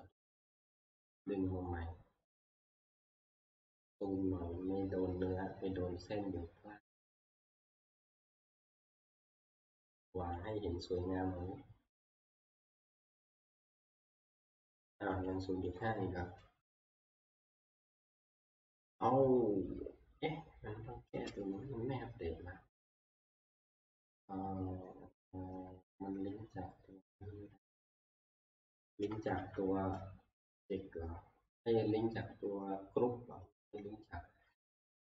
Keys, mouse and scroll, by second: 0.2 click, 1.0 t, 3.2-3.9 scroll, 6.0 scroll, 7.5 click, 7.8-8.5 scroll, 9.5-9.9 scroll, 10.5 click, 13.2 click, 15.3 click, 15.8 click, 17.2 click, 27.6 click, 27.9 alt+Tab, 29.1 alt+Tab, 29.4 alt+Tab, 33.7 scroll.